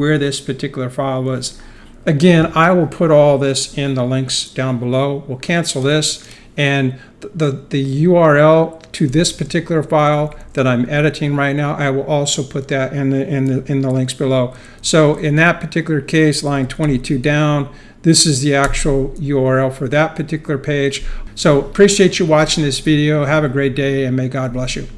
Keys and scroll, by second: 9.1-10.2 typing, 9.4 Escape, 14.5 super+5, 16.2-17.9 typing, 18.6 Return.